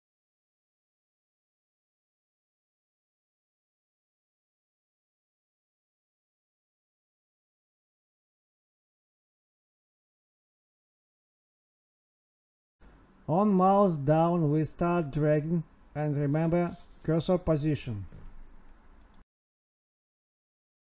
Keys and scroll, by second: 1.3 Tab, 5.5 ctrl+s, 16.8 space, 17.0 space, 17.6 Right, 18.1 space, 18.6 Right, 19.0 Left, 19.8 space.